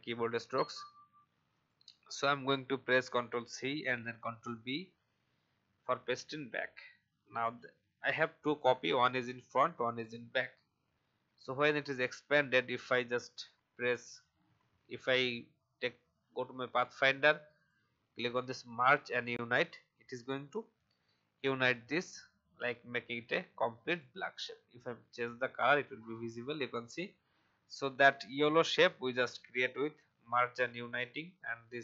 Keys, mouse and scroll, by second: 3.6 ctrl+c, 4.5 ctrl+b, 11.7-26.2 drag, 27.7 alt+scroll up 1.